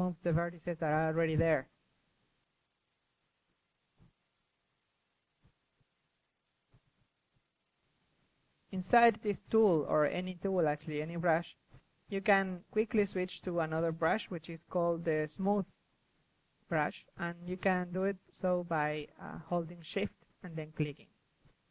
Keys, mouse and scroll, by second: 0.2-1.7 middle drag, 0.6-2.2 drag, 1.9-2.7 middle drag, 2.3 f, 2.7 click, 3.2 ctrl+z, 4.1 ctrl+z, 4.5-5.0 drag, 4.7 ctrl+z, 5.1-5.6 drag, 5.6 KP_3, 5.7 click, 6.1 KP_1, 6.7 ctrl+z, 6.9 click, 7.1-8.3 drag, 8.3 KP_3, 9.0-9.7 drag, 9.4 KP_1, 11.6 middle click, 12.2 KP_3, 13.8-14.4 drag, 14.0 KP_3, 15.1-17.8 drag, 17.8-18.2 middle drag, 18.4-20.9 drag, 20.9-21.7 middle drag.